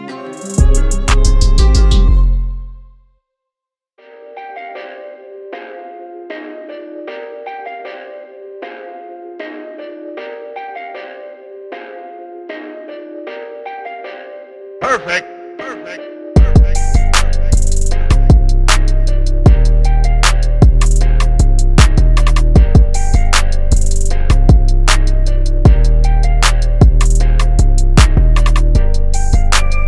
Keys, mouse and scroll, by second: 0.0 shift+Tab, 1.6 shift+Tab, 4.6 Tab, 7.3-15.1 drag, 15.6 click, 16.9 Tab, 20.3 click, 21.2 Tab, 23.9 click, 24.9 Tab, 26.3 shift+Tab, 28.7 click.